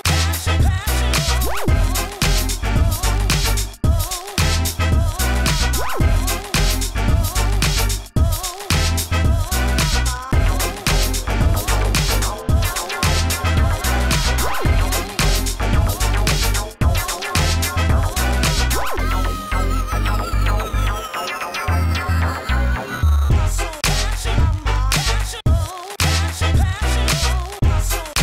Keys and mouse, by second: 0.2 Tab, 0.6 Tab, 0.6 middle click, 0.9 Tab, 1.1 g, 1.8 Tab, 2.4 click, 7.5-8.6 drag, 8.0 g, 10.3 s, 10.5 f, 13.0 s, 13.6 f, 14.2 shift+f, 17.0 f, 17.7 s, 18.5 f, 20.3 s, 23.4 s, 24.5 s, 26.8 s, 27.1 f.